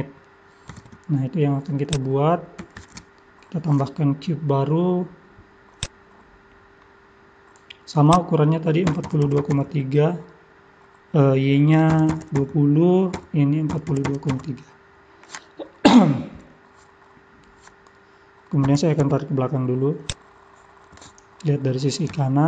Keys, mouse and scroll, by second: 1.8 click, 2.8 shift+a, 6.6-7.7 scroll down 16, 8.1 click, 16.2-16.8 scroll up 14, 18.7-19.8 scroll up 4, 18.7 g, 20.9 KP_3, 21.3-22.1 scroll up 5, 22.2 shift+middle click.